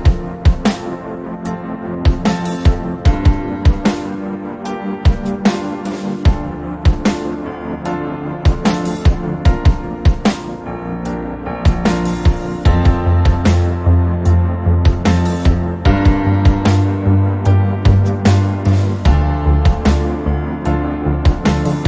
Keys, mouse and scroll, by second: 0.5-2.2 middle drag, 2.9 middle click, 4.6 middle click, 4.9-5.7 drag, 5.7-6.3 middle drag, 6.3-7.7 drag, 7.7-10.7 middle drag, 11.3 Tab, 12.7 right click, 12.8-13.9 drag, 14.9-17.3 drag, 20.3-20.9 drag, 21.6 click.